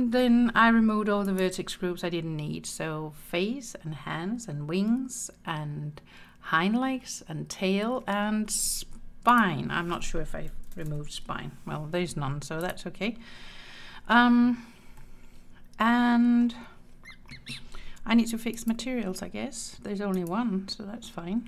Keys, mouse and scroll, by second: 1.3 click, 9.3-12.9 drag, 15.0-16.5 middle drag, 18.7 click, 20.2 click.